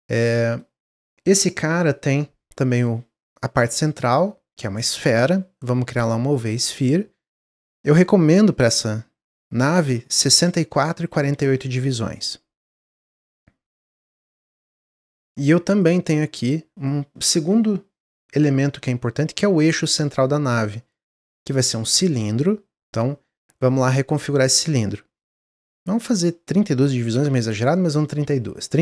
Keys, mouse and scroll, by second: 3.7-6.8 drag, 7.8-11.0 drag, 14.1 click, 14.6-18.8 drag, 23.6-26.8 drag.